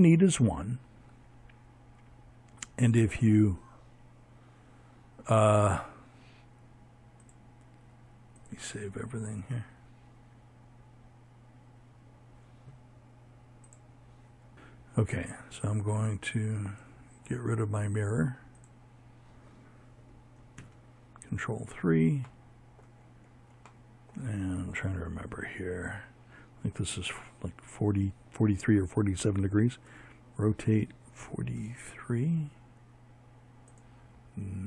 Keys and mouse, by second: 5.3-11.5 drag, 16.4-18.4 drag, 18.4 ctrl+KP_3, 23.1 z, 27.7 r, 32.9 click.